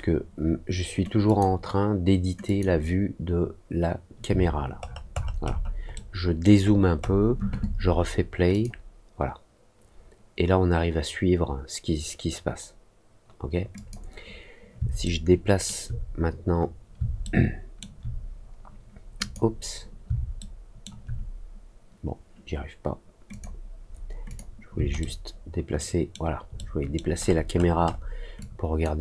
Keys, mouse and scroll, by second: 1.2 click, 2.4 click, 4.8 alt+middle click, 5.1-5.6 alt+scroll up 2, 5.9 alt+middle click, 6.6-7.1 alt+scroll up 2, 8.4 click, 13.7 click, 15.0 alt+middle click, 17.2 alt+middle click, 19.1 click, 20.3 alt+middle click, 23.2 click, 24.2 click, 24.9-26.0 alt+middle drag, 26.5 alt+middle click, 27.1-27.7 alt+scroll up 2, 28.3 alt+click.